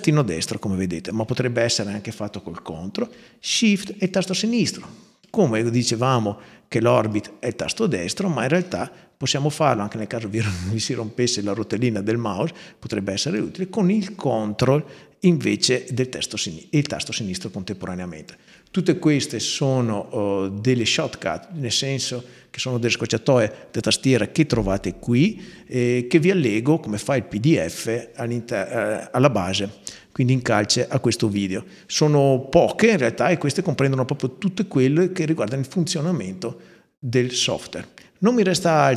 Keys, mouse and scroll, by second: 3.8-5.1 ctrl+shift+drag, 6.9-8.2 right drag, 15.5 ctrl+drag, 20.7 click, 33.9-38.9 middle drag, 33.9-35.2 scroll down 1.